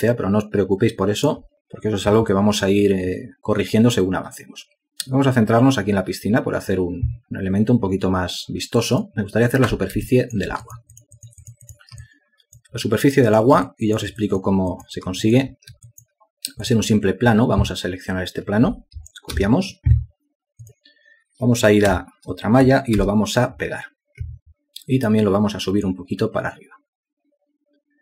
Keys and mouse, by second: 1.5 alt+click, 12.5 ctrl+alt+click, 13.5 alt+double click, 13.6 alt+click, 14.0 alt+double click, 14.1 alt+click, 15.5 ctrl+alt+click, 16.2 alt+shift+click, 16.7 alt+click, 17.2 alt+click, 17.3 alt+double click, 17.7 ctrl+alt+click, 18.4 alt+click, 26.7 w.